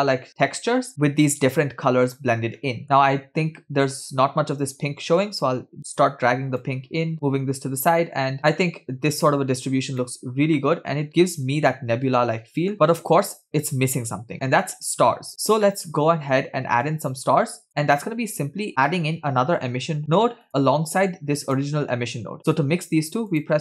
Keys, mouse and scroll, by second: 2.7 middle click, 2.8-5.0 scroll up 3, 5.2-6.5 drag, 7.1 click, 10.3-12.7 middle drag, 15.4 scroll down 2, 15.7 middle click, 17.0 click, 17.2 click, 18.0 middle click, 18.7 shift+a, 20.5-21.5 scroll up 2, 21.5 click, 23.1 shift+a.